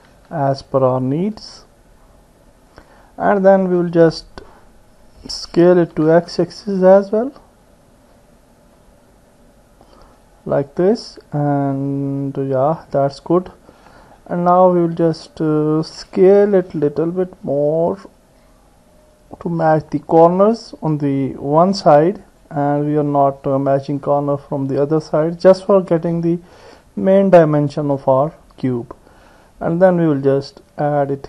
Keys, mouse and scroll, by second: 0.2 s, 3.3-9.2 middle drag, 6.0 s, 16.6 s, 27.2 click, 28.0 click, 30.3-31.2 drag.